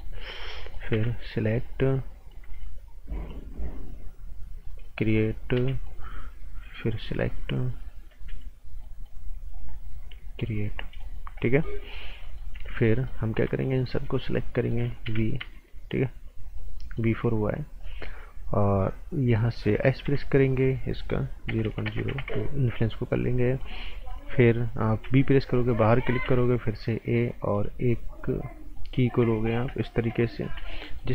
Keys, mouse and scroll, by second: 0.9 b, 1.5 click, 2.4 a, 3.5 click, 4.8 right click, 5.5 b, 5.8 right click, 6.8 click, 7.0 right click, 8.1 a, 8.6 scroll up 1, 8.8 right click, 9.5 click, 11.1 scroll down 1, 11.4 right click, 11.9 scroll down 1, 12.2 right click, 12.5 z, 12.8 right click, 13.8 shift+click, 14.2 right click, 15.0 b, 16.4 shift+click, 16.7 right click, 17.8 shift+click, 20.0 s, 20.7 click, 21.4 KP_0, 21.6 KP_Decimal, 21.8 KP_0, 22.2 KP_Enter, 23.1 right click, 23.8 scroll up 1, 24.0 right click, 25.0 b, 25.4 click, 25.7 right click, 26.2 a, 26.6 scroll up 1, 27.5 click, 30.4 r, 30.8 right click.